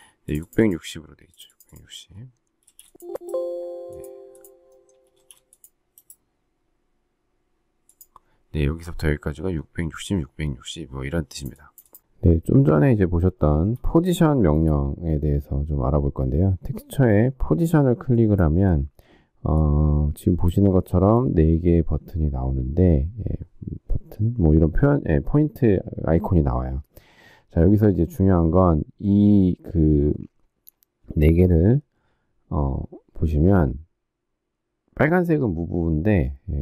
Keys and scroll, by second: 2.6 space, 5.1 space.